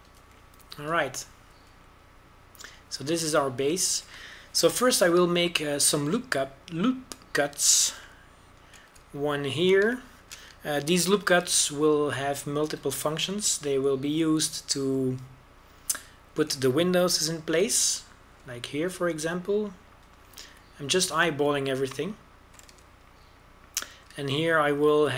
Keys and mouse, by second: 1.9 KP_7, 2.3 z, 2.7 z, 3.2 a, 5.1 a, 6.3 ctrl+r, 10.9 click, 12.9 ctrl+r, 19.0 ctrl+b, 22.2 a, 23.9-25.1 right drag.